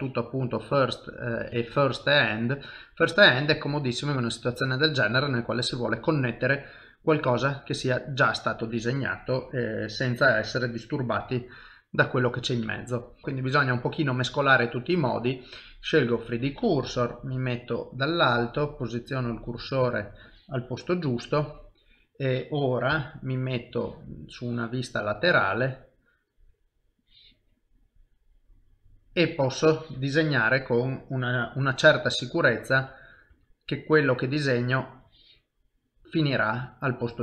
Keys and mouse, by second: 4.6 middle click, 6.1 i, 9.2 click, 10.8 middle click, 12.2 middle click, 13.2 shift+middle click, 13.4 shift+middle click, 14.8 click, 16.9 KP_7, 19.0 shift+right click, 19.5 shift+middle click, 21.0 middle click, 22.9 KP_1, 24.3 click, 28.3 middle click, 31.8 KP_3, 32.8 KP_1, 33.3 KP_3, 35.0 click, 36.4 middle click.